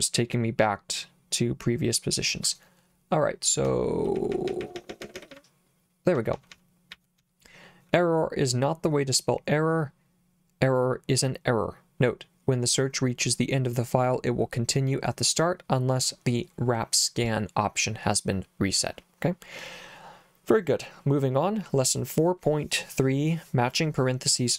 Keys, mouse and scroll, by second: 3.7-7.7 typing.